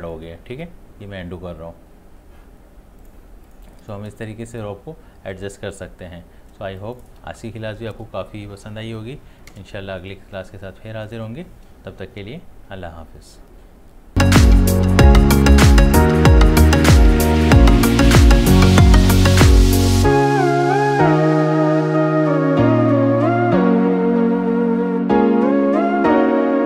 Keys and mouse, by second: 0.5 ctrl+z, 3.0 click, 3.7 space, 6.6 space, 6.8 click, 7.1 space, 11.0 click.